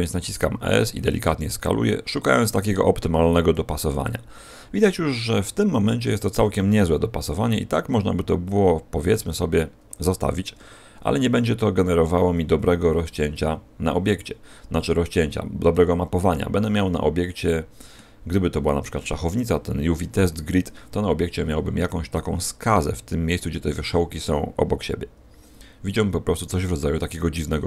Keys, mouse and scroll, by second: 1.0 click, 1.2 g, 4.0 click, 5.1-5.9 scroll up 2, 6.4 s, 9.0 shift+click, 9.4-10.6 scroll down 2, 11.0 scroll down 1, 16.6 middle click.